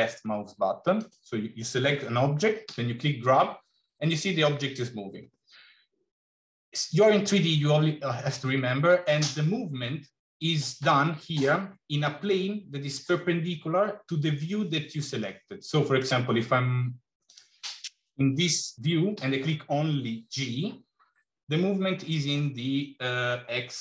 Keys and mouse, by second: 1.0 click, 2.5 g, 19.0 g.